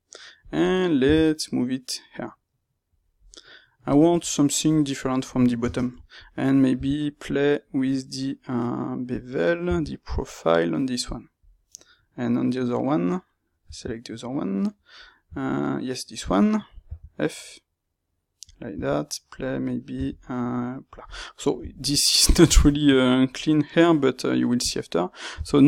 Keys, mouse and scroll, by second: 0.4 click, 0.9-2.9 middle drag, 0.9 g, 2.9 click, 3.1-25.6 middle drag, 4.0 Tab, 5.5 space.